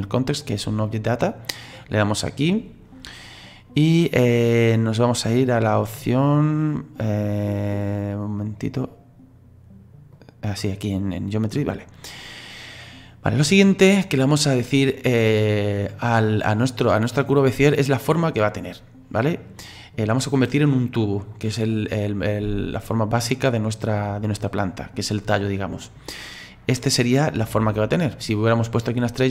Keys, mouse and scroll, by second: 1.7 click, 6.7-8.5 drag, 8.5-10.1 scroll down 3, 10.1 click, 11.7-14.0 scroll down 4, 14.0-14.7 scroll up 4, 14.7 scroll down 2.